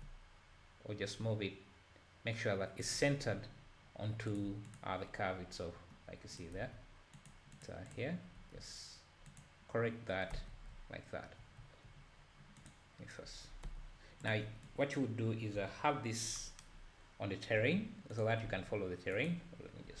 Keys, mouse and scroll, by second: 4.7 click, 5.8-6.3 scroll down 1, 6.4 click, 6.6 Tab, 7.6 click, 7.9 click, 8.4 r, 10.3 Tab, 10.7 scroll down 1, 10.8 `, 11.6 `, 12.2-12.7 scroll down 1, 12.7 click, 13.7 h, 14.3 click, 15.0 click, 15.6 KP_7, 16.1-16.4 scroll down 1, 16.7-17.3 scroll up 4, 17.6 g, 18.5 r.